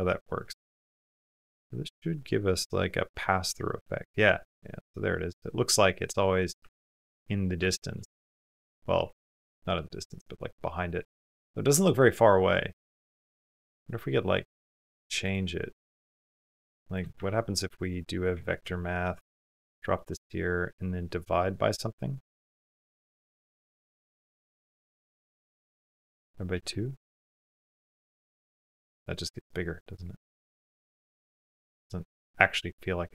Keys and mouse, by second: 1.1 click, 2.3 click, 3.0-4.0 middle drag, 4.7 middle click, 5.6 middle click, 5.9 middle click, 6.7 ctrl+middle click, 7.5 shift+middle click, 7.8 ctrl+middle click, 8.6 ctrl+middle click, 9.1 middle click, 9.5 click, 10.3 middle click, 10.5 click, 11.9 middle click, 14.3 click, 15.0 click, 15.9 middle click, 17.1 shift+a, 19.5 typing, 19.8 click, 20.4 click, 23.5 click, 26.3 space, 27.1 space, 27.3 click, 28.3 middle click, 29.7 click, 30.8 middle click.